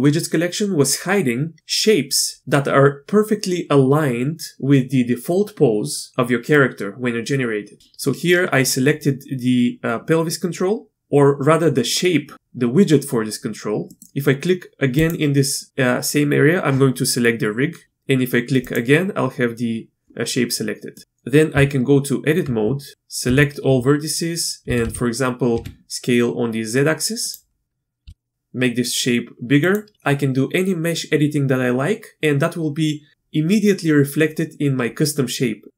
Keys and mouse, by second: 13.9 middle click, 18.6 click, 20.9 middle drag, 21.5 Tab, 23.2 1, 23.6 a, 24.6 s, 28.0 s.